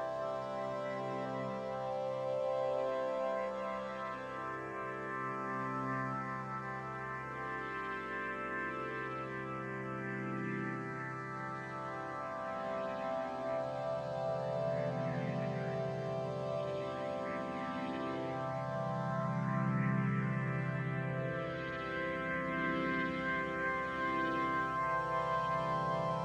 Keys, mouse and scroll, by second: 4.1 click, 4.9 middle click, 5.0-11.7 drag, 13.5-15.8 drag, 18.5 click, 19.0 middle click, 19.1 shift+click, 19.6 shift+middle click, 19.7 shift+click, 21.1 ctrl+shift+v, 22.0 ctrl+shift+b.